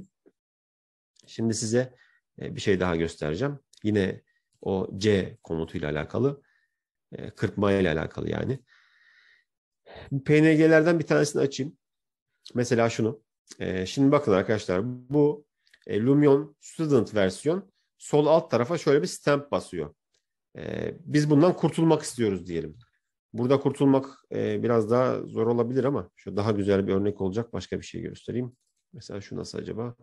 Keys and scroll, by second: 25.0 ctrl+-, 27.1 ctrl+-.